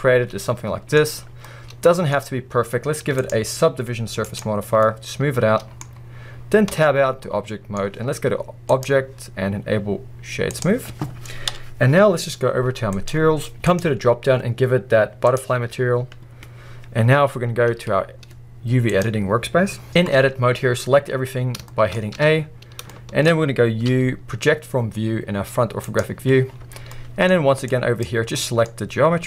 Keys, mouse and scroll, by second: 4.4 click, 4.8 middle click, 6.7 Tab, 7.3 middle click, 8.9-10.6 middle drag, 10.6-14.2 drag, 11.5 KP_1, 14.2-15.6 middle drag, 15.6-19.0 drag, 19.9 KP_1, 20.3 scroll up 1, 21.7-22.7 shift+middle drag, 22.2 a, 22.6 scroll up 1, 23.0 middle click, 26.0 u, 28.0 click.